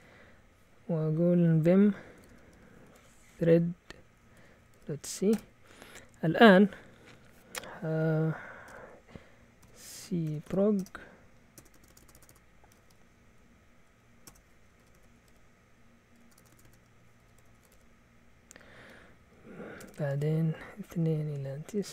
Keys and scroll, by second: 1.9-5.3 typing, 5.3 Return, 8.6-12.8 typing, 14.2-18.2 typing, 19.7 Escape, 19.8-21.9 typing.